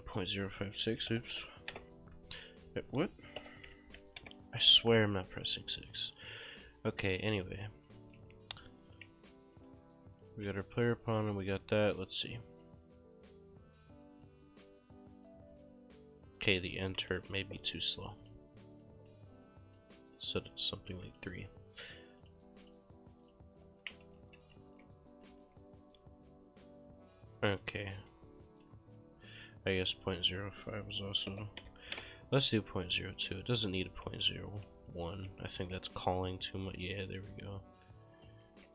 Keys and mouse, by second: 0.9 ctrl+a, 1.1-2.2 typing, 3.2-4.6 typing, 5.5 click, 7.8 click, 7.9 right click, 8.0 s, 8.9 click, 9.6 right click, 9.7-12.6 typing, 14.3 a, 16.1 Escape, 16.6 right click, 17.1 ctrl+space, 18.1 click, 18.9 right click, 20.9 click, 21.0 3, 21.2 click, 23.9 right click, 24.0-25.3 typing, 26.8 Escape, 27.4 right click, 30.0 click, 31.1-32.4 typing, 33.2 click, 34.6 right click, 34.8-36.5 typing, 37.7-38.7 typing.